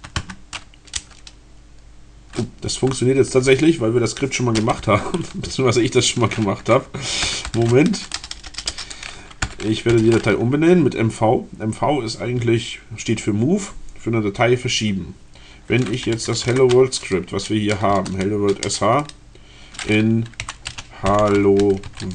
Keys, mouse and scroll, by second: 0.9 Return, 6.9-10.1 typing, 15.8-16.7 typing, 17.9 space, 18.6 BackSpace, 20.1-22.1 typing.